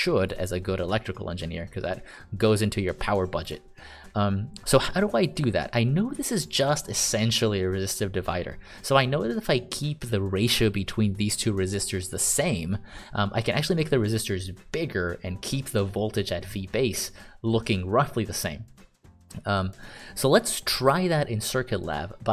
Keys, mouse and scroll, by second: 0.6 click, 0.7 click, 5.4 click, 5.5 click.